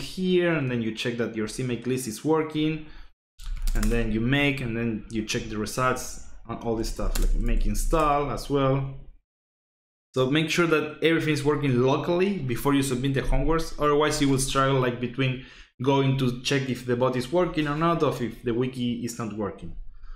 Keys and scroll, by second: 3.0-4.0 typing, 6.5-8.3 typing.